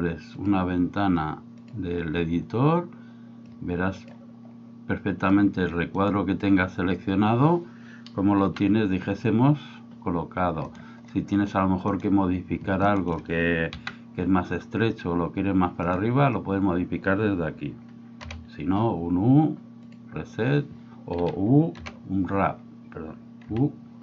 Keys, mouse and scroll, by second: 0.5-1.8 drag, 3.5 click, 8.4 g, 13.7 g, 18.2 u, 22.4 u, 23.5 u.